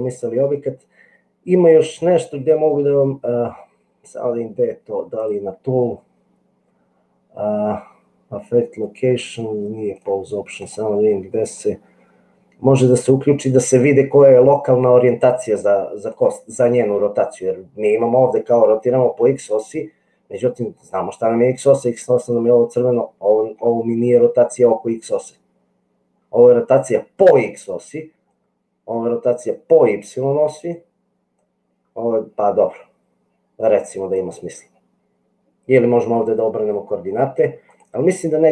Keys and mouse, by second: 5.2 click, 9.9 click, 10.7 click, 18.4-20.8 drag, 22.8 middle click, 25.1-27.5 drag, 28.3-30.7 drag, 31.6-34.4 drag.